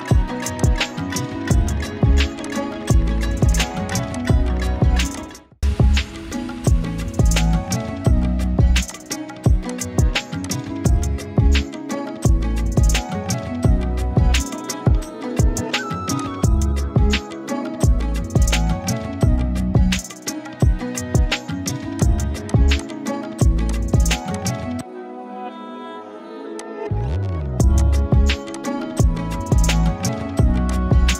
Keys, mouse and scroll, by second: 0.0 click, 2.4-3.3 alt+shift+click, 3.6 z, 3.8 click, 4.0 space, 4.1 click, 5.6 Up, 8.8 click, 9.3 space, 9.6 click, 9.8 space, 10.4 click, 11.0-12.2 typing, 14.0 typing, 16.2 click, 20.7 click, 22.2 z, 22.5 click, 22.7 space, 22.8-25.6 drag, 26.6-27.5 alt+shift+click.